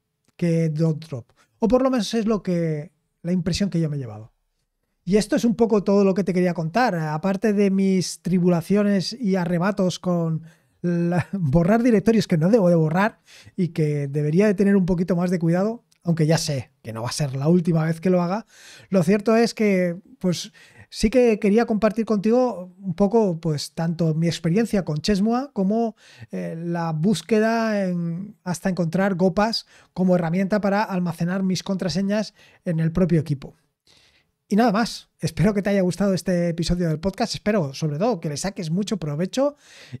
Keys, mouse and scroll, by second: 3.0-40.0 scroll down 6.